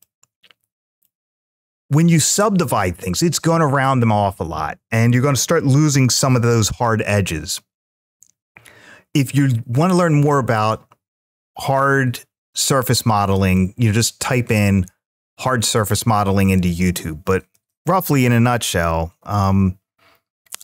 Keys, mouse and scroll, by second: 13.3-14.1 middle drag, 17.3 Tab, 18.1-19.2 middle drag, 20.3 middle click.